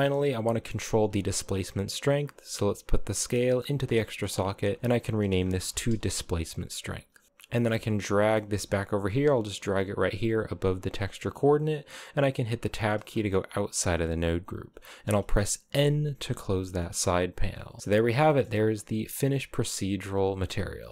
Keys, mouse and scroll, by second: 0.9-1.9 scroll down 1, 1.9 click, 3.7 middle click, 4.4 click, 4.5-7.2 drag, 7.2 g, 7.8 middle click, 8.0 g, 10.8-12.1 middle drag, 12.1 Tab, 12.4-12.8 scroll down 3, 12.8-14.1 shift+middle drag, 14.1-14.9 scroll up 4, 15.4 n, 16.8 click, 17.3 scroll up 3, 17.8 scroll down 1, 17.9 shift+middle click, 18.2-19.3 scroll up 10, 19.3-20.9 middle drag.